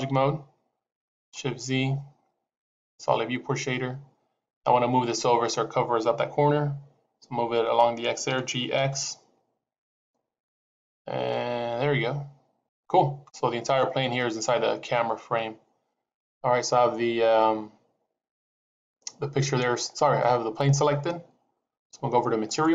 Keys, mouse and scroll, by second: 2.5 shift+z, 8.1 g, 22.3 click.